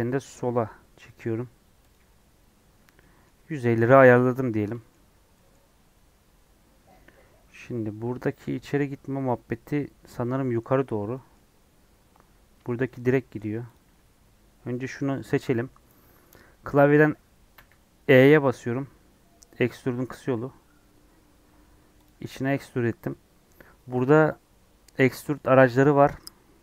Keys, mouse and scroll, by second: 2.0 Tab, 2.3-2.7 scroll down 7, 2.8 Tab, 2.9-4.0 middle drag, 4.0 scroll down 1, 4.1 middle click, 4.4 scroll up 2, 4.7-5.7 shift+middle drag, 5.7-6.3 scroll up 1, 6.3 scroll up 3, 12.7 middle click, 13.1 scroll down 1, 13.7 click, 17.5 e.